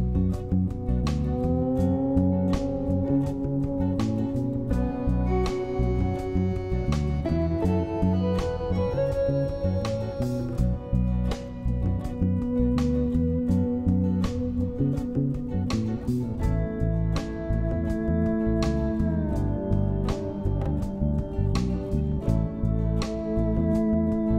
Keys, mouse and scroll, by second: 0.8 m, 9.9 F2, 11.5 s, 15.5 m.